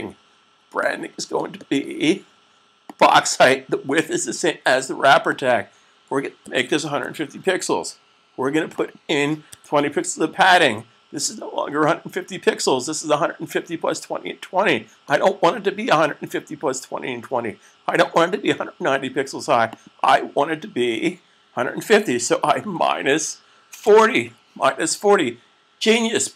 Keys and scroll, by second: 6.3-7.2 typing, 9.1-9.8 typing, 22.6-24.1 typing.